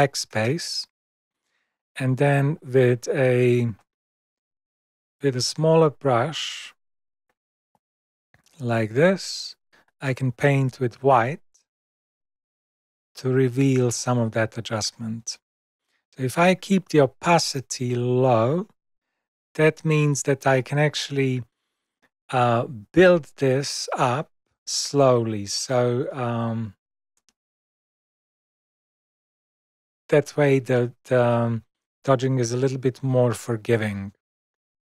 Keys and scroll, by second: 0.2 super+BackSpace, 3.7 super+0, 6.0 [.